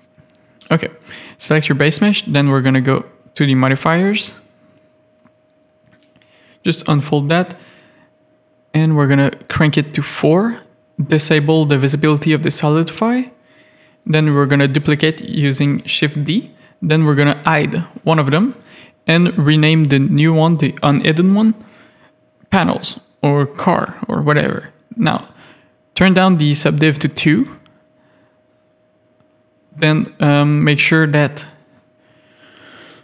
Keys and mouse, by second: 0.2 shift+middle click, 0.7 middle click, 3.3 middle click, 5.4 click, 7.0 click, 13.7 shift+d, 26.0 click, 27.9 click.